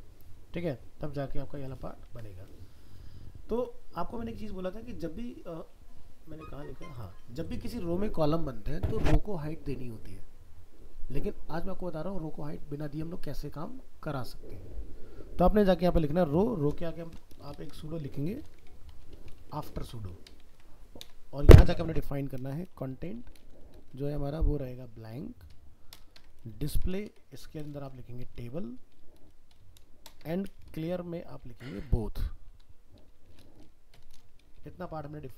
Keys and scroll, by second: 2.1 ctrl+s, 35.2 ctrl+s.